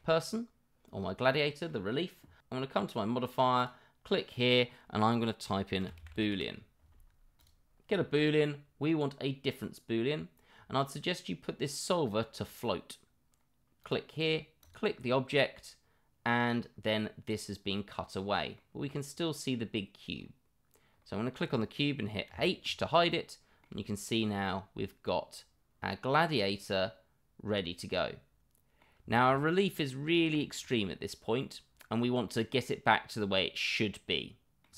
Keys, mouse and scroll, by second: 3.5-7.5 drag, 12.3 click, 13.8 click, 14.6 click, 17.3-18.5 middle drag, 19.0 click, 23.1-23.6 middle drag, 23.8-24.2 middle drag, 24.4-28.8 middle drag, 29.1 middle drag, 29.5-29.8 middle drag, 30.3 middle drag, 31.4-31.9 middle drag, 32.2-34.6 middle drag.